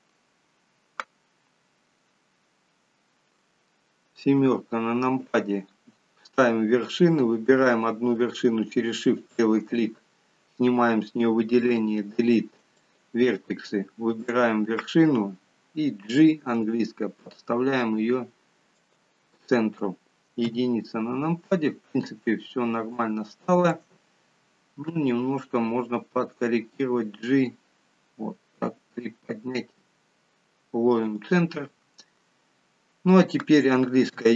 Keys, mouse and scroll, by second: 4.5 KP_7, 9.3 shift+click, 11.7 Delete, 14.3 click, 16.2 g, 20.5 KP_1, 21.8-22.3 scroll up 5, 23.0 shift+middle click, 26.8 g, 34.2 e.